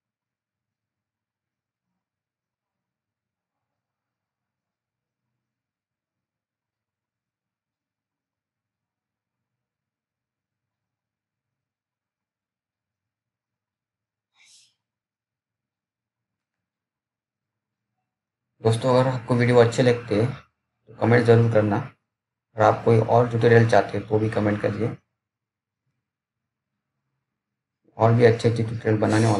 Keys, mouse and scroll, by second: 1.2 scroll down 1, 2.5 click, 8.6 right click, 12.3 click, 16.2-18.2 typing, 19.5 click, 19.5 click, 24.5-26.5 typing, 28.2 click.